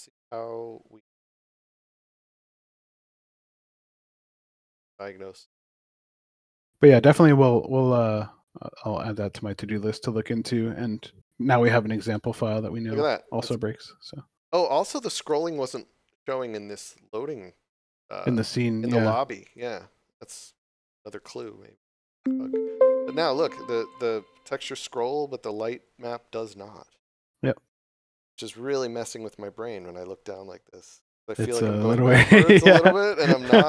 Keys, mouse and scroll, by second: 12.9 click, 19.4 click, 25.7 d, 25.8 w, 28.7 d.